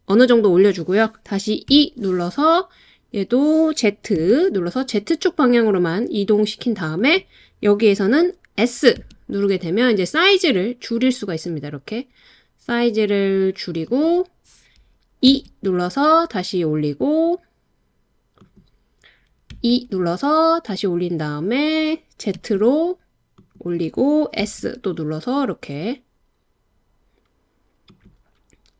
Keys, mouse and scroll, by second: 1.7 e, 4.2 z, 7.0 click, 9.0 s, 13.9 click, 15.3 e, 18.4 click, 19.6 e, 22.4 z, 23.4 click, 24.4 s, 27.9 click.